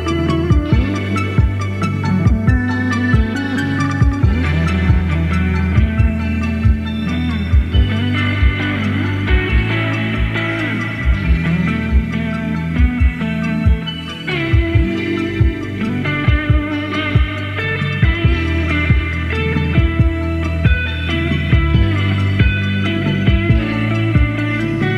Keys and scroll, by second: 5.9 1, 6.0 Return, 10.5 BackSpace.